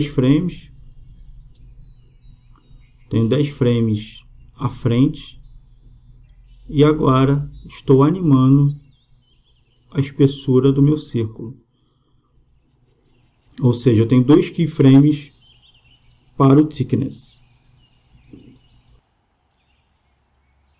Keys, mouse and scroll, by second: 7.6-9.3 drag, 15.4-17.2 drag.